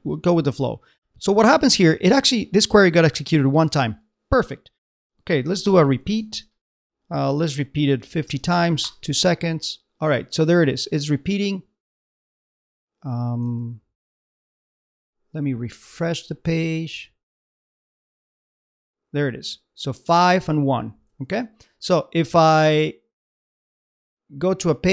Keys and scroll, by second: 13.4 super+Tab, 18.0 super+Tab, 21.2 super+Tab.